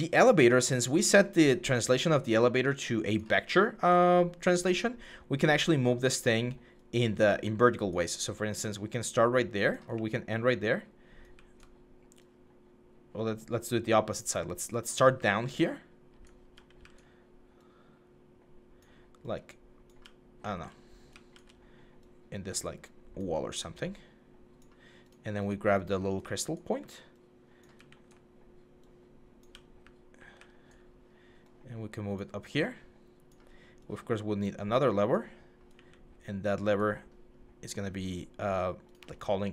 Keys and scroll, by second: 3.1 typing, 9.7-11.1 typing, 14.8-16.6 typing, 19.8-21.1 typing, 26.0 typing, 27.5 typing, 29.1-30.2 typing, 35.5 typing.